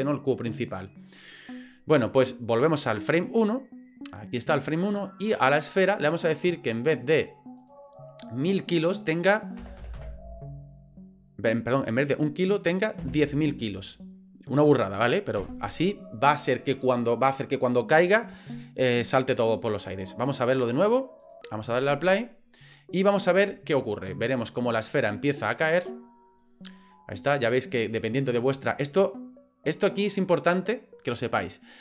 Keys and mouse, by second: 3.4 click, 6.8 click, 9.8 KP_0, 21.2-21.7 drag.